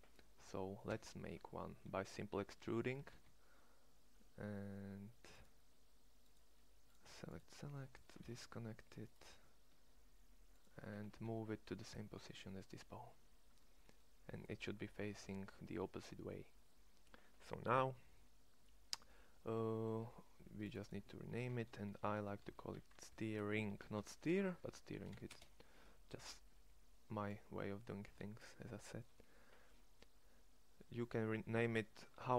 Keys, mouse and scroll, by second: 0.7 e, 8.0 alt+p, 10.9 shift+s, 13.5 middle click, 22.1 e.